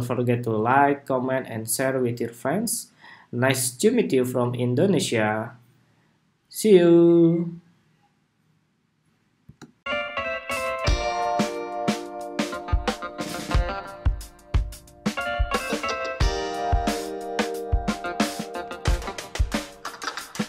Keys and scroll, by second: 9.5 shift+super+2.